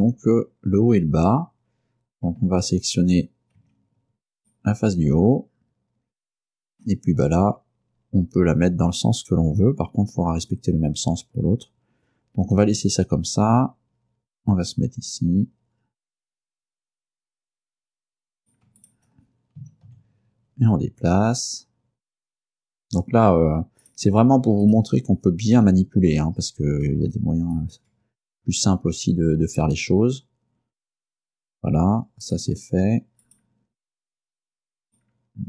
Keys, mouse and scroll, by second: 2.5 scroll up 1, 3.7 Tab, 4.5 right click, 6.9-9.8 middle drag, 9.8-10.1 scroll up 1, 12.6 g, 16.3 click, 18.5 shift+right click, 18.9 shift+right click, 19.7 g, 20.0 x, 23.0 click, 23.9 right click, 24.7 shift+right click, 25.7 g, 27.6 ctrl+click, 31.4 right click, 32.3 right click, 33.3 right click, 34.9 right click.